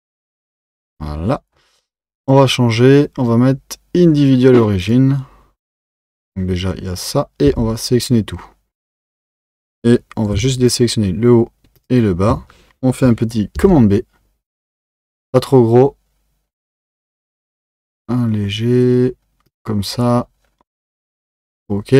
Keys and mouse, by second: 2.2-5.3 drag, 9.0 a, 10.7 alt+shift+click, 11.8 alt+shift+click, 13.6 b.